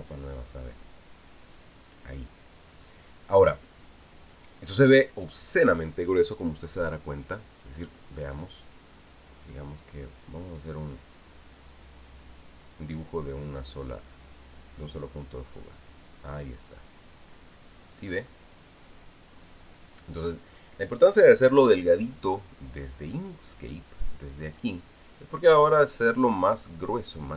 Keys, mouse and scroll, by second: 0.6 click, 2.3 click, 15.7 click, 23.8 click, 25.1 click, 26.5 click.